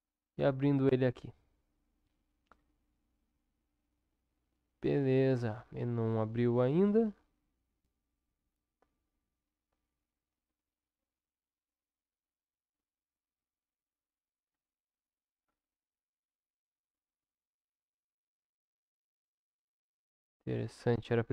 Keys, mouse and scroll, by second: 18.5-21.3 drag.